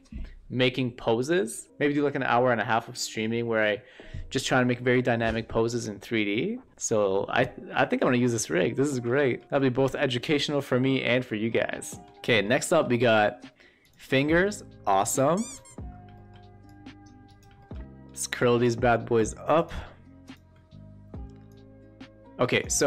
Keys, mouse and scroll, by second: 6.8 middle click, 8.5-9.0 shift+middle drag, 9.2 middle click, 12.2 middle drag, 12.5 shift+middle click, 12.9 middle drag, 13.8 click, 14.2 shift+middle click, 15.0 click, 15.8 e, 16.1 shift+middle drag, 16.6-17.3 drag, 17.5 shift+middle drag, 17.8 shift+middle drag, 19.6-19.9 shift+drag, 21.4-22.5 drag.